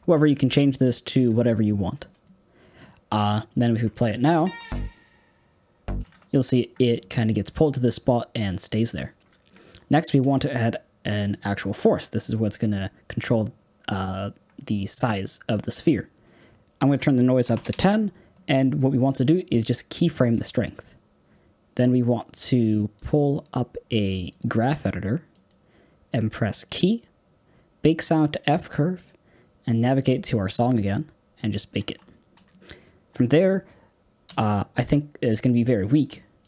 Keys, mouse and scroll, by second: 2.2-3.9 middle drag, 3.9 click, 4.3 space, 5.9 space, 8.6 click, 9.4-11.3 middle drag, 11.3 shift+a, 12.3-17.6 middle drag, 17.6-20.0 drag, 22.4-31.8 drag.